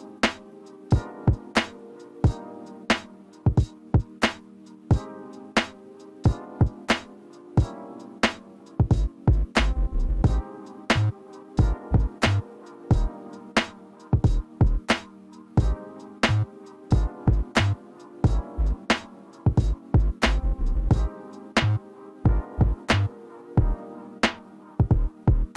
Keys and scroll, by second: 12.9 Up, 13.2 Up, 13.6 Up, 14.0 Up, 14.2 Up, 15.7 Up, 16.0 Up, 16.2 Up, 16.4 Up, 16.9 Up, 17.2 Up, 17.4-18.5 Up, 18.1 Up.